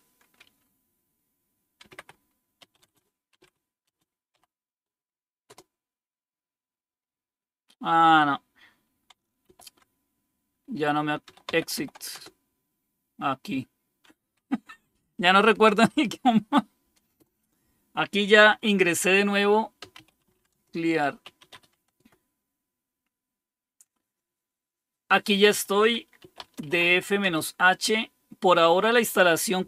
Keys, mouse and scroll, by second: 1.5-4.2 typing, 5.4 typing, 9.4 ctrl+c, 10.9-12.2 typing, 14.9 Up, 15.3 Up, 15.4 Up, 15.8 Up, 17.2 Return, 19.5-22.0 typing, 22.1 Return, 25.9-27.5 typing.